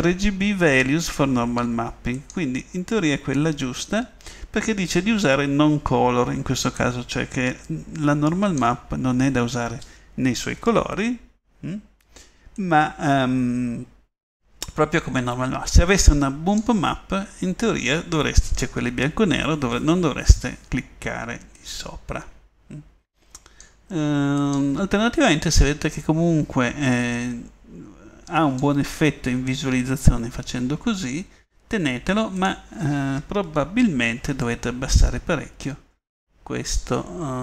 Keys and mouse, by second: 0.5 click, 32.5-35.1 middle drag.